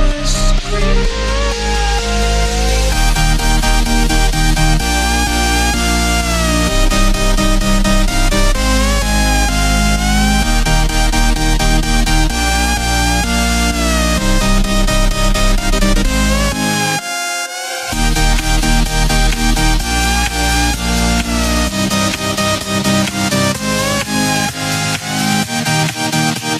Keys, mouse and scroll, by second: 4.0 click, 4.8 click, 5.6 shift+d, 7.8 s, 9.6 s, 13.4-13.8 scroll up 2, 13.8-14.5 shift+middle drag, 14.5 Tab, 15.4 click, 15.6 b, 18.0 s, 20.3 click, 20.8 Tab, 21.7 click, 21.9-22.2 scroll down 1, 22.2-24.3 middle drag, 24.3 KP_1.